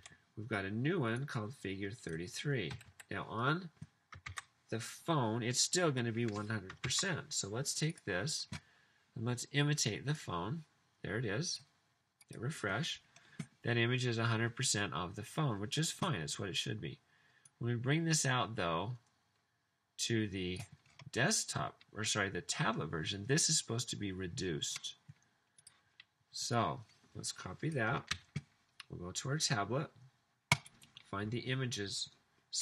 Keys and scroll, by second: 0.1 super+v, 2.9 typing, 4.3 super+s, 7.0 super+s, 28.1 super+c.